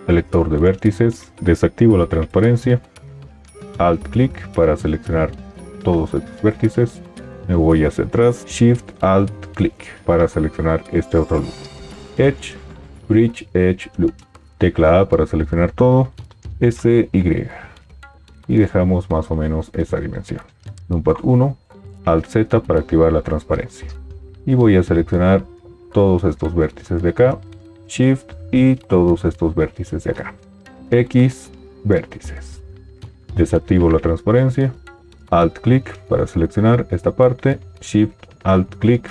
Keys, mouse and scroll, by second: 1.7 alt+z, 3.7-5.2 alt+drag, 8.4-10.3 alt+shift+drag, 14.7 a, 16.6 s, 16.6 y, 20.8 KP_1, 22.1 alt+z, 30.8 x, 33.4 alt+z, 35.2 alt+click, 37.8-39.1 alt+shift+drag.